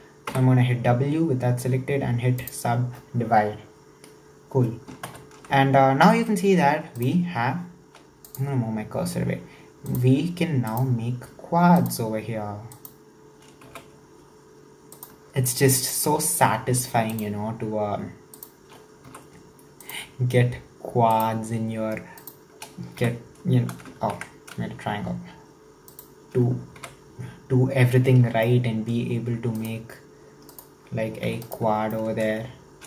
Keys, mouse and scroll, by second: 0.3 w, 5.0 ctrl+KP_7, 7.0 right click, 8.2 click, 9.9-10.6 right drag, 10.7 shift+right drag, 11.8 shift+right click, 12.7 shift+right click, 13.7 f, 14.9 right click, 15.8 shift+right click, 17.1 shift+right click, 18.3 shift+right click, 19.1 f, 19.9-21.2 right drag, 22.2 shift+right click, 23.0 f, 24.0 ctrl+z, 25.9 shift+right click, 26.8 f, 28.3 scroll down 4, 28.5 middle click, 29.1-29.6 scroll up 3, 29.6 right click, 30.5 right click, 31.3 3, 31.4 right click, 31.9-32.8 middle drag.